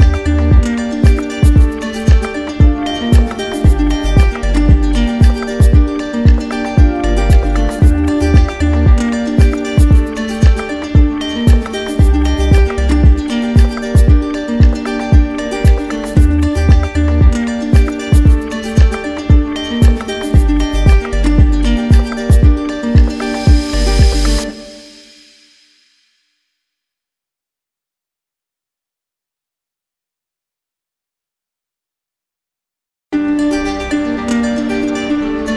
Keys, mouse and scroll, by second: 2.1 click, 2.4 click, 2.8 shift+click, 3.5 click, 4.1 click, 4.2 alt+click, 7.6 click, 8.4 click, 9.8 click, 10.9 click, 11.4 click, 14.2-15.3 drag, 16.0-17.1 drag, 17.5-18.1 typing, 19.4 click, 20.0-20.7 typing, 21.8-22.9 drag, 22.1-23.0 typing, 25.2-26.3 drag, 30.2-31.3 drag, 32.6-33.7 drag.